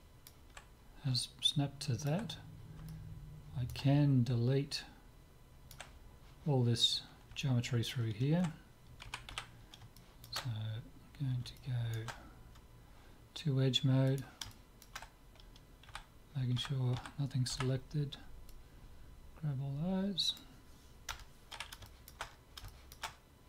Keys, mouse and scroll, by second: 1.0 scroll up 1, 4.5-6.3 scroll up 1, 7.4-9.2 middle drag, 9.2 KP_7, 9.4 z, 10.0-13.3 middle drag, 14.1-16.1 drag, 14.5-15.9 right drag, 15.9 a, 16.7 a, 17.0 a, 17.6 c, 21.9-23.4 middle drag.